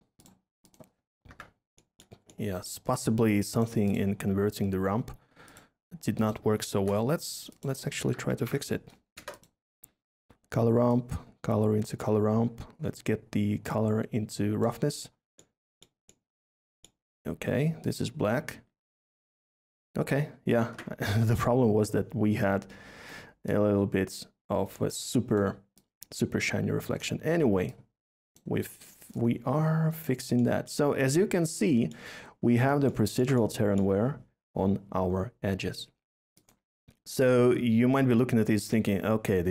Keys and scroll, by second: 1.3 Delete, 6.7 a, 7.9-9.1 typing.